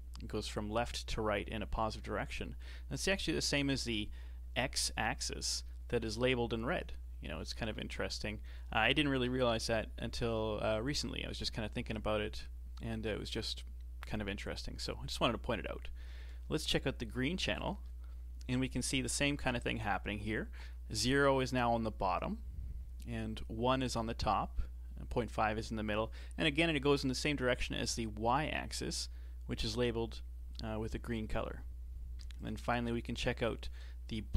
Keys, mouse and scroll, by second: 6.9-9.2 middle drag, 9.2 KP_7, 17.6 ctrl+shift+click, 32.4 ctrl+shift+click.